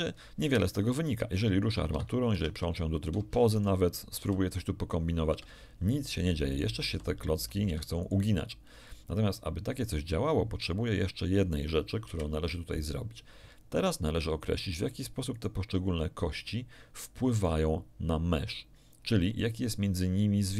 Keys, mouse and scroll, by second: 0.3 right click, 1.1 g, 1.9 Escape, 2.3 Tab, 3.1 ctrl+Tab, 3.5 ctrl+right click, 4.3 ctrl+r, 5.3 Escape, 6.5 right click, 6.8 r, 7.6 Escape, 8.0 right click, 12.0 KP_1, 15.3 right click, 17.3 click.